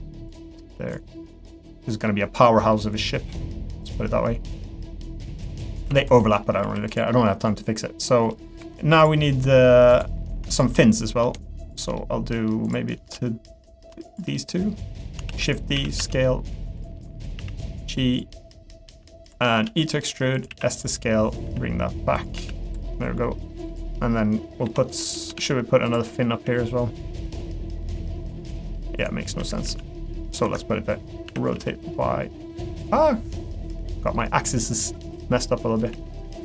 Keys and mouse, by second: 0.3 click, 1.1-2.2 middle drag, 2.4 middle click, 2.8 middle click, 3.9-6.1 drag, 6.2 middle click, 6.6 3, 6.9 click, 7.1 middle click, 8.3 middle click, 9.2 middle click, 9.9 click, 12.0 middle click, 14.1 shift+click, 14.3 middle click, 15.3 shift+d, 15.7 s, 17.0 middle click, 17.3 g, 19.4 middle click, 19.6 e, 20.5 s, 20.9 middle click, 21.4 g, 22.3 s, 22.9 middle click, 23.6 click, 24.6 l, 24.9 middle click, 25.3 shift+d, 26.0 middle click, 26.4 g, 27.4 middle click, 28.5 r, 30.5 Escape, 31.2 r, 33.8 middle click, 34.3 g, 35.2 middle click.